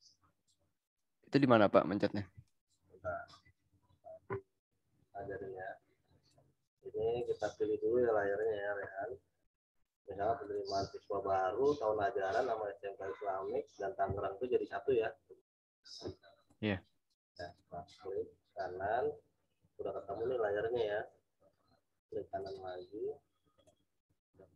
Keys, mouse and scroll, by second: 6.2 right click, 8.3 click, 9.8 right click, 10.4 click, 16.4 right click, 17.4 click, 22.4 right click, 23.5 click.